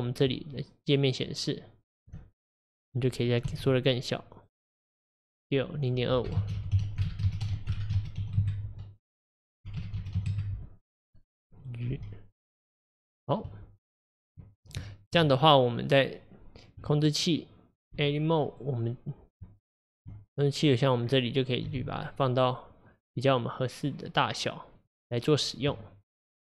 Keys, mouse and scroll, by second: 2.2 Tab, 2.5 click, 3.5 s, 6.9-10.9 drag, 10.9-11.9 scroll up 2, 11.9 g, 14.9-15.9 shift+middle drag, 15.9 click, 18.0 Tab, 18.6 click, 20.1 Tab, 20.8 click, 21.1-21.7 scroll down 3, 21.7 g.